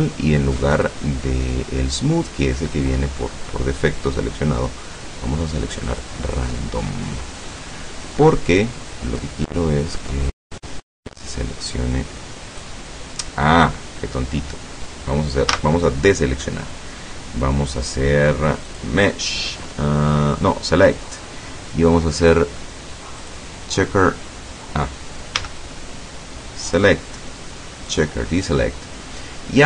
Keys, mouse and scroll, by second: 0.8 click, 5.9 click, 6.7 scroll down 1, 7.1 middle click, 7.8 scroll up 1, 9.3-12.8 drag, 15.6 a, 18.7 click, 22.3 click, 23.3 click, 25.4 a, 26.7 click, 27.9 click.